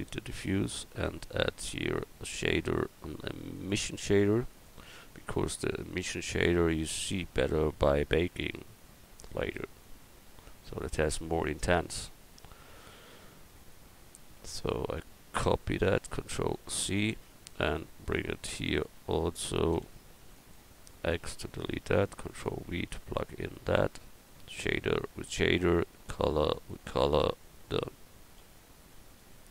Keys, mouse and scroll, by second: 7.1 click, 14.4-15.7 drag, 16.5 ctrl+c, 18.4-19.4 drag, 19.8 c, 21.1 x, 22.5 ctrl+v, 27.9 Tab, 28.4 a.